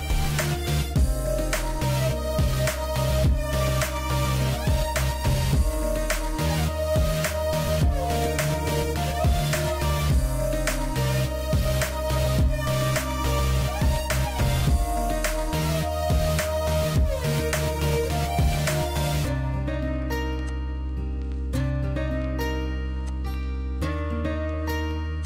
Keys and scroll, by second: 0.8 ctrl+g, 2.9 m, 3.4 Escape, 12.6 p, 13.6 Escape, 18.0 ctrl+c, 18.5 Escape, 20.5-24.7 typing.